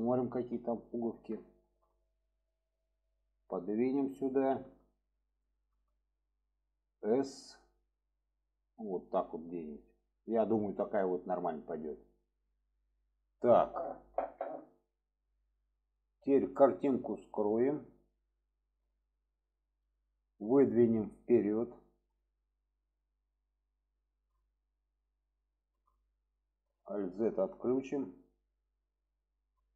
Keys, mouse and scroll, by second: 1.5 shift+middle drag, 2.5-3.5 drag, 4.1 shift+middle click, 5.4-5.7 shift+middle drag, 9.3-12.2 drag, 13.0-13.5 middle drag, 17.8 click, 18.3-19.5 middle drag, 21.0-23.0 drag, 23.9-24.2 shift+middle drag, 24.5-25.0 middle drag, 25.5-25.8 shift+middle drag, 26.0-26.4 middle drag, 26.8 alt+z, 27.4-27.7 shift+middle drag, 28.1-29.0 middle drag.